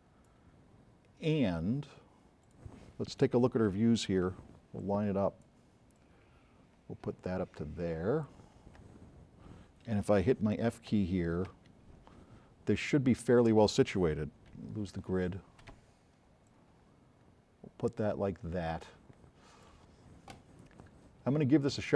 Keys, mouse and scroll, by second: 2.5 drag, 4.4 v, 10.5 f, 11.6 f, 14.6 g, 15.4 b, 15.7 v, 16.6 click, 17.7 click.